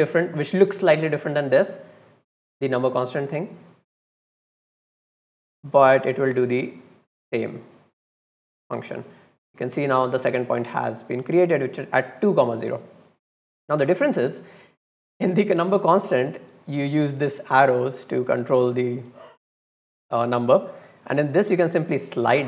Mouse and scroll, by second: 4.5-6.5 drag, 8.6 click, 12.6 click, 15.3 click, 16.2 click, 16.5 click, 16.7 click, 17.2 click, 17.5 click, 17.7 click, 18.1 click, 18.7 click, 21.2-22.4 drag.